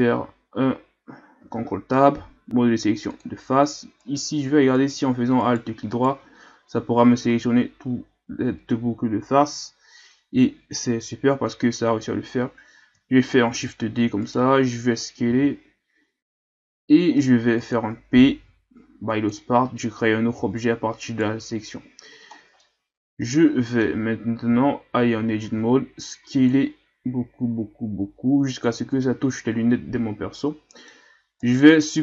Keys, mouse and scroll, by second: 1.4 ctrl+Tab, 4.0 alt+right click, 4.8 alt+right click, 5.4 alt+right click, 5.9 alt+right click, 13.5 shift+d, 15.3 s, 18.5 p, 20.3 Tab, 21.1 right click, 22.3 scroll down 3, 22.6-24.0 middle drag, 24.0-24.5 scroll up 1, 24.5 Tab, 24.9 a, 25.2 a, 25.4 a, 26.2 s, 29.1-30.9 middle drag, 30.9-31.4 scroll up 1, 31.4 right click, 31.9 scroll down 1.